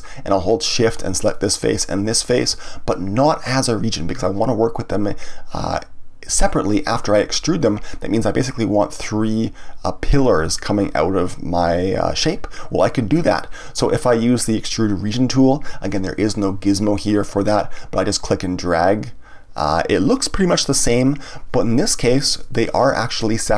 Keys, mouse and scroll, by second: 1.3 shift+click, 2.0 shift+click, 18.1 click, 22.4 click, 23.3 click.